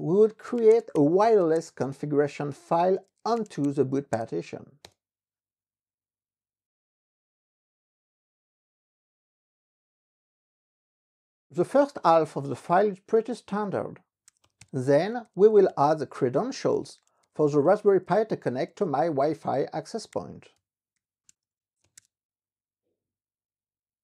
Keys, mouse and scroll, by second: 0.2-4.4 typing, 4.8 Return, 14.0-17.2 typing.